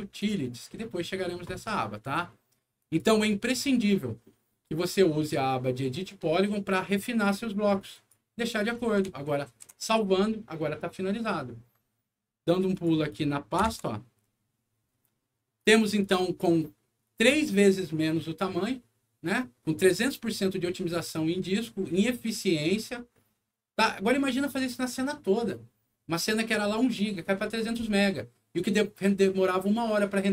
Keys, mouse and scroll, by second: 0.1 click, 2.8 click, 7.9 click, 8.7 middle click, 9.5 ctrl+s, 12.7 click, 15.5 ctrl+click.